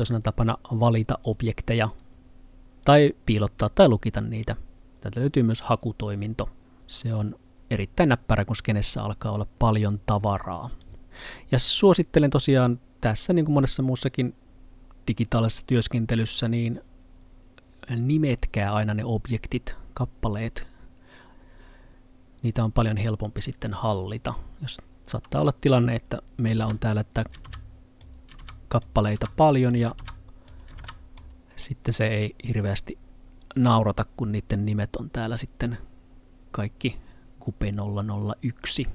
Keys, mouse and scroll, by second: 1.3 click, 5.7 click, 10.2 click, 26.7-30.9 typing, 27.3 click, 28.1 click, 28.9 click, 29.8 click, 30.6 click, 31.3 click, 34.2-38.3 scroll down 1.